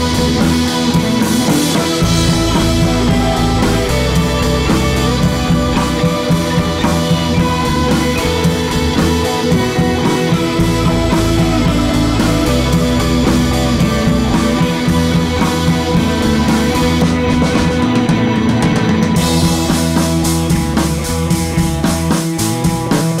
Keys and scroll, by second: 18.2 super+z, 21.2 Down, 21.3 Right, 21.6 Up, 21.9 Up, 22.0 Up, 22.2 Up, 22.4 Up.